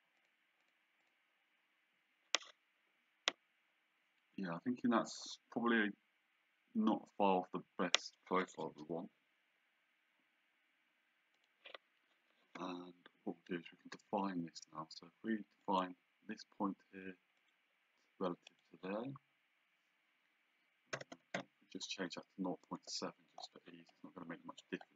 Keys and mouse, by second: 0.2 click, 11.4 click, 14.0 d, 15.6 click, 17.4 click, 18.5 click, 21.0 KP_0, 21.4 KP_7, 22.8 Return.